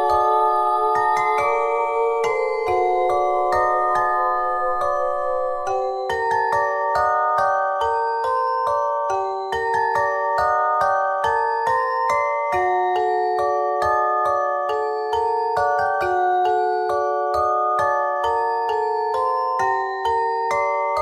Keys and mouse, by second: 0.3 click, 3.7 Tab, 8.5 click, 9.7 Tab, 10.2 ctrl+Tab, 12.0 middle click, 12.2 middle click, 15.8 ctrl+r, 16.4 ctrl+Tab, 19.6 x, 20.4 ctrl+Tab.